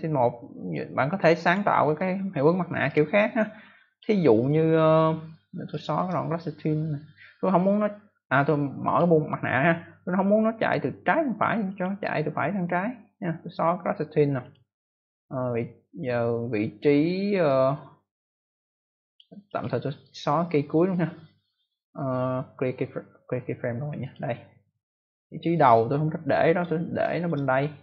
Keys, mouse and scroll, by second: 0.6 click, 1.4 click, 2.8 click, 5.6 click, 5.9 right click, 6.0 double right click, 8.8 click, 9.8 click, 11.6 click, 11.7 click, 11.9 right click, 12.1 double right click, 14.3 click, 17.4 click, 19.4 click, 19.5 click, 19.9 right click, 23.9 click, 25.1 click, 26.9 click.